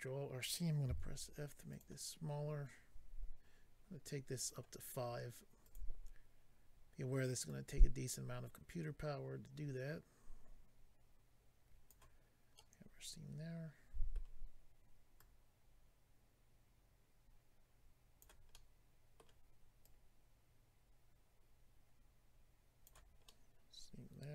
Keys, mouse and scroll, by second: 1.7 click, 1.7 f, 1.8 click, 4.4 click, 4.5 click, 5.6 click, 5.7 click, 7.4 click, 12.5 middle click, 15.2 click, 18.5 middle click, 19.8 click, 23.3 middle click.